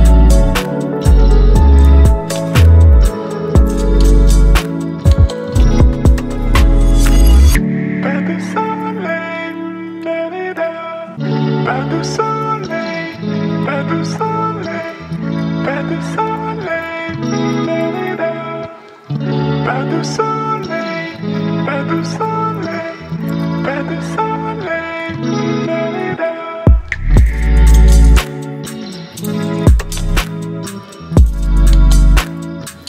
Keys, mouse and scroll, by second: 13.3 click, 22.6-24.6 drag, 31.2-31.8 drag.